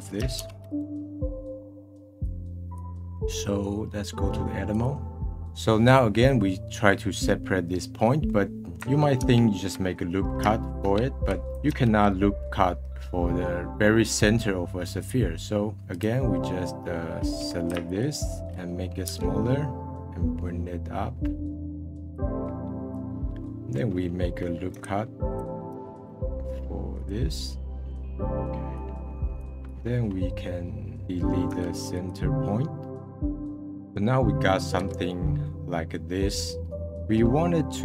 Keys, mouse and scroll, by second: 0.3 shift+d, 2.2-3.1 drag, 3.1-4.7 middle drag, 4.7-5.4 drag, 5.4 middle click, 8.1-9.2 middle drag, 9.2 alt+r, 10.7 shift+r, 17.9-19.0 alt+shift+drag, 19.0 s, 20.0-21.4 middle drag, 21.4-23.1 drag, 23.1-25.7 middle drag, 25.7 ctrl+r, 27.3-28.7 middle drag, 28.7-31.0 drag, 31.4 x, 32.5 middle click, 32.9 /, 33.0 scroll down 2, 33.3 middle click, 34.0-34.4 scroll up 2, 34.4-34.8 middle drag, 34.8 /, 35.2-37.3 middle drag, 37.3 scroll up 1, 37.6-37.8 middle drag.